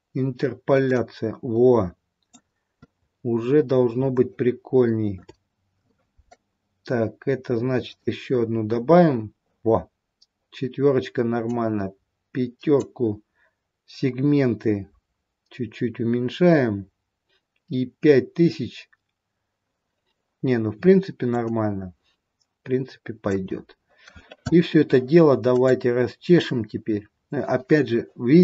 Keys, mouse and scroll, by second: 1.0 middle click, 3.3-3.9 scroll up 2, 4.6 shift+middle click, 7.8 click, 11.4 click, 20.5-21.6 scroll down 1, 21.6 middle click, 21.6-23.1 scroll down 2, 25.4 click.